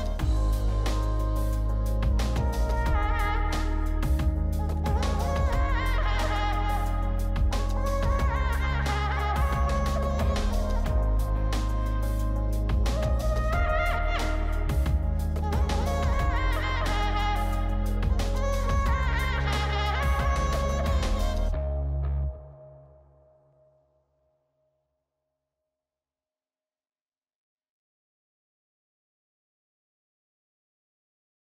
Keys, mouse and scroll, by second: 12.3 double click, 20.2-21.1 scroll up 3, 21.2 scroll down 2, 22.1 scroll down 1, 22.2 scroll up 3, 22.8-26.5 scroll down 2.